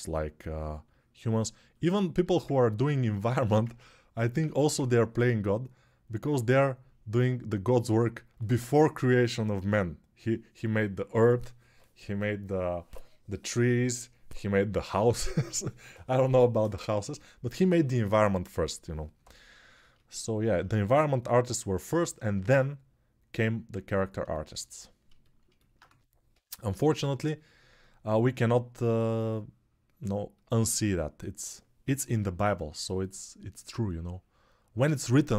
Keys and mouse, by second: 4.2 1, 25.6 2, 26.1 [, 26.6 [, 26.7 [, 31.6 [, 31.8 [.